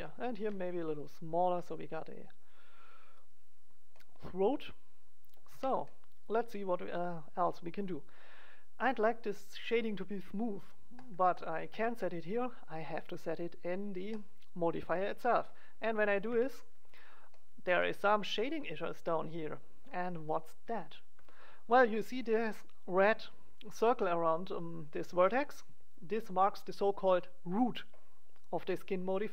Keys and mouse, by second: 0.3 ctrl+a, 0.7-1.7 drag, 3.2 click, 5.0 middle click, 5.4 Tab, 10.9-13.8 drag, 14.1-16.0 drag, 16.0 middle click, 16.2 Tab, 20.2-21.7 drag, 21.7-28.8 middle drag.